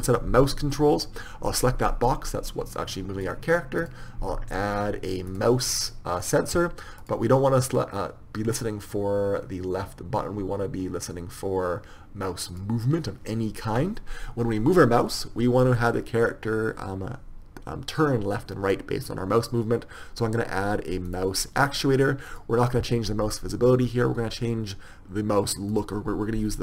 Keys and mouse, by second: 0.3 p, 3.4 click.